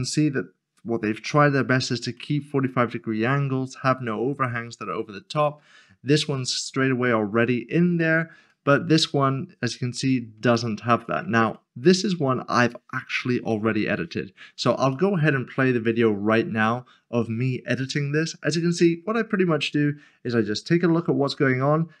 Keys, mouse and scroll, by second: 2.1 middle click, 5.4 middle click, 7.6 scroll down 1, 8.5 shift+middle click, 9.8 middle click, 10.6 shift+middle click, 11.5 middle click, 12.6 click, 14.9 middle click, 16.9 shift+middle click, 17.0 click, 17.4-20.2 typing, 17.6 shift+middle click, 18.0 right click, 18.3 middle click, 19.0 middle click, 19.3 click, 19.4 ctrl+KP_Subtract, 19.5 shift+click, 19.7 scroll down 1, 19.9 ctrl+click, 20.1 ctrl+click, 20.3 ctrl+click, 20.5 scroll down 1, 20.7 middle click, 20.9 middle click, 21.1 scroll up 1, 21.2 middle click, 21.4-21.7 typing, 21.4 click, 21.6 middle click, 21.8-22.0 scroll down 2.